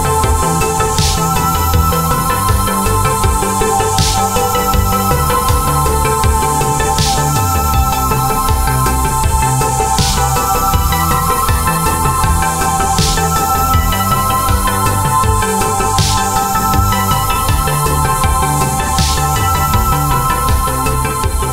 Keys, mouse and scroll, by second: 0.5 right click, 1.3 click, 3.8-5.1 alt+scroll up 2, 5.1 click, 7.5-7.9 alt+scroll up 2, 9.8 click, 11.2 alt+click, 12.9 click, 15.9 shift+click, 17.4 click, 18.1 shift+click, 19.2 click, 21.1 click.